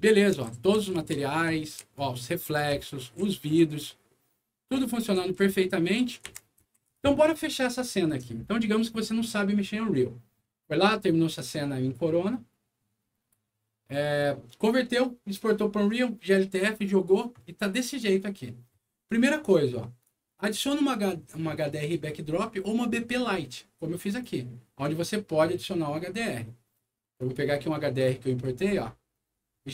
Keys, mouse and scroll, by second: 0.0-2.7 typing, 2.5-6.9 right drag, 4.8-6.7 typing, 17.2 right click, 20.0 click, 24.0 click, 27.2 click, 28.5 click.